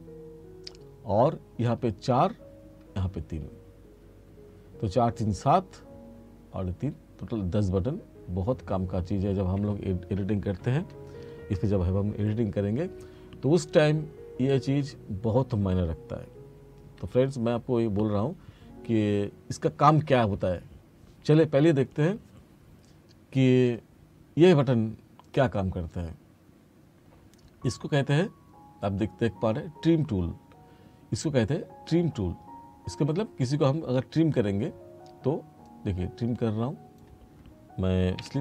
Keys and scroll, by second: 38.3 F2.